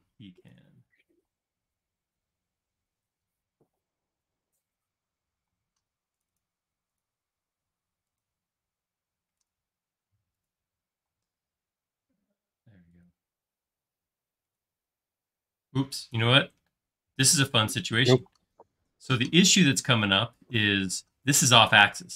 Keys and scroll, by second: 1.1 typing, 5.6 space, 10.9 q, 16.2 Escape, 18.3 space.